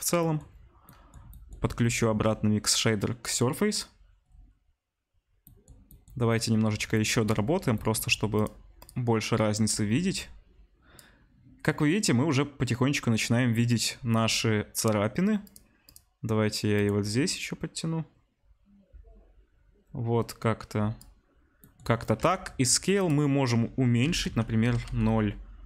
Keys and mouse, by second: 8.8-22.9 middle drag, 15.6 click, 22.9-25.6 drag.